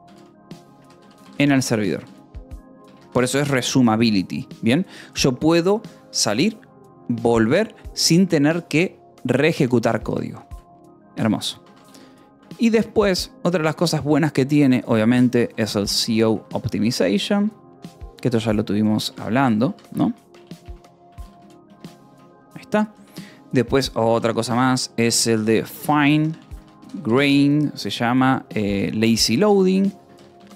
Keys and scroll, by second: 0.0-2.9 typing, 3.2 Escape, 4.1 ctrl+s, 11.2 Escape, 11.3-13.4 typing, 15.3-19.8 typing, 19.7 Escape, 21.0-23.4 typing, 21.9 Escape, 25.2-27.5 typing, 29.1-30.5 typing.